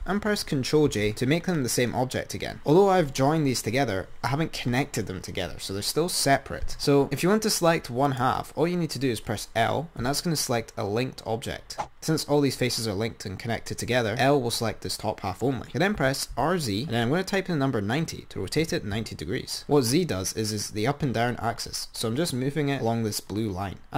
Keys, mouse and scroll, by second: 1.0 ctrl+j, 2.7 Tab, 8.3 click, 10.3 l, 12.0 l, 16.3 r.